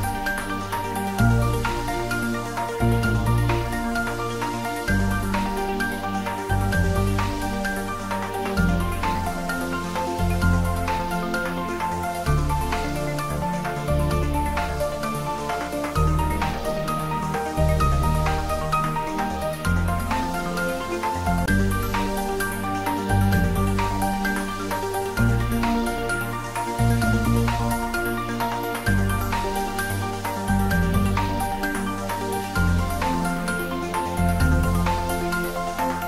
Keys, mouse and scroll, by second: 1.4 click, 1.8 scroll up 1, 2.9-3.8 middle drag, 4.7 click, 5.1-5.5 scroll up 1, 5.6 shift+z, 6.2 scroll down 1, 7.2-8.1 middle click, 8.1 shift+z, 8.4-9.0 middle click, 9.7 click, 10.3 scroll up 1, 11.2 click, 13.4-14.1 scroll down 1, 15.0 3, 16.1 click, 17.9 alt+shift+click, 19.7-20.1 scroll down 1, 20.1-21.1 middle drag, 22.0 e, 23.3 click, 23.6-24.3 scroll up 1, 24.3-26.2 middle drag, 26.4-26.8 scroll down 1, 26.8-27.4 middle drag, 29.1 ctrl+b, 31.0 click, 31.3-32.2 middle click, 32.2 Tab, 32.4 scroll up 1, 33.0-33.9 middle click, 34.3-35.3 middle click, 35.6-36.0 scroll up 1.